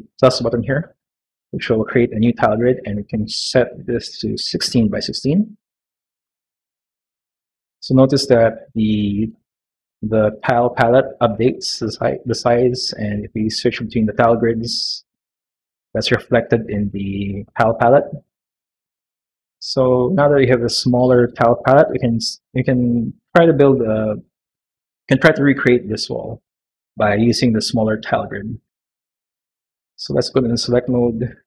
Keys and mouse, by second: 3.1-5.3 drag, 5.6-7.5 drag, 13.3 click, 14.0 click, 14.5 click, 16.6 click, 29.1 click, 29.8 click.